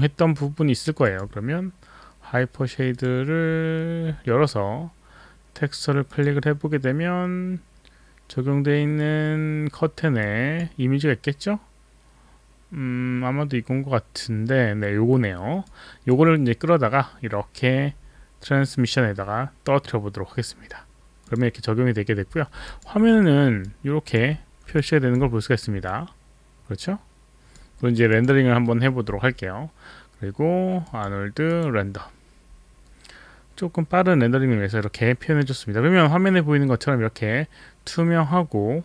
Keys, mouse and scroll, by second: 1.1 click, 2.9 click, 6.1 click, 10.3 click, 15.6 click, 16.8 middle click, 22.6 click, 23.2 alt+middle click, 23.2 click, 23.6 alt+click, 24.8 alt+click, 25.9 alt+click, 26.4-27.7 alt+drag, 27.8 alt+middle click, 28.6 alt+middle click, 30.8 click, 31.5 click.